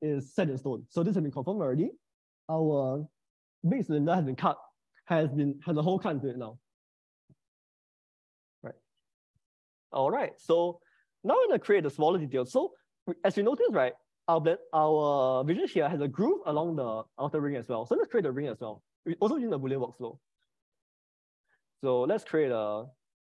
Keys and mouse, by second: 2.8-6.6 middle drag, 20.0-22.4 middle drag, 22.7-23.2 drag.